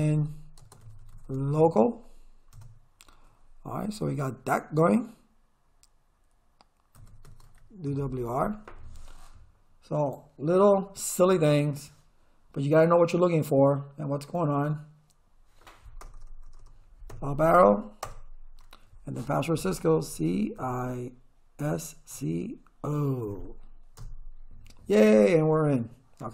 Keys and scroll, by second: 0.0-2.1 typing, 2.5 Return, 6.7-8.0 typing, 16.0 Return, 17.1 Up, 18.1 Return, 20.1 c, 20.6 i, 21.6 s, 22.1 c, 24.0 Return.